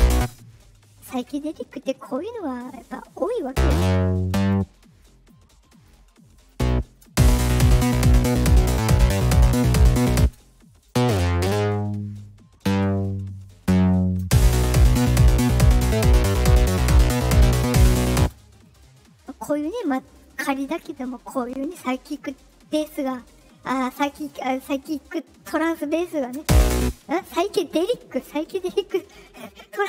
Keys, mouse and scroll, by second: 0.1 space, 3.4-4.4 drag, 4.9 right click, 5.6 right click, 6.4 click, 7.0 space, 10.1 space, 10.8-14.1 drag, 14.2 space, 18.1 space, 26.3 space, 26.7 space.